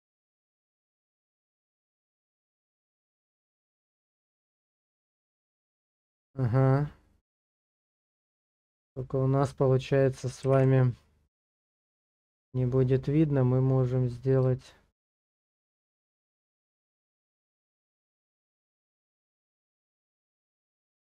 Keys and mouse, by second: 0.0-2.8 middle drag, 3.6 KP_0, 10.5 Page_Down, 13.4 middle click, 14.7 shift+middle click, 15.3 middle click, 16.0 shift+middle click, 17.5 middle click, 19.0 shift+middle click, 20.4 ctrl+middle click.